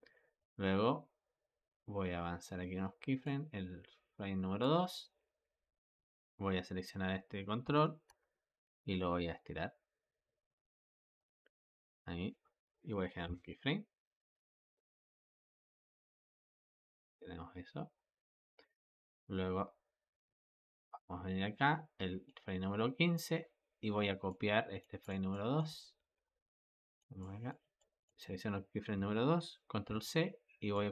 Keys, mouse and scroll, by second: 0.3-3.4 drag, 4.5 click, 7.5 g, 13.1 i, 14.6-17.6 drag, 24.1 click, 24.9 click, 25.2 click, 25.9 ctrl+c, 26.6 click, 27.1-27.7 drag, 29.7 ctrl+c, 30.6-30.9 drag.